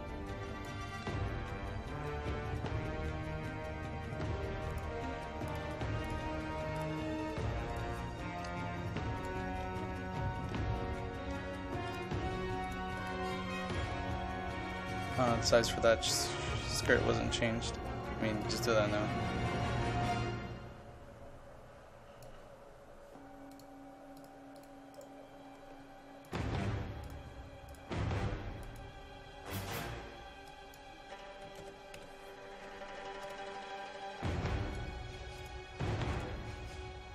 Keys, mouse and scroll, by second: 1.1 ctrl+z, 1.9 ctrl+z, 4.7-9.7 drag, 9.9 ctrl+z, 10.6 ctrl+z, 11.2 ctrl+z, 11.9-23.0 drag, 25.0-26.1 right drag, 26.3 click, 31.5 KP_1, 31.6 KP_2, 32.0 KP_8, 33.3-37.1 drag.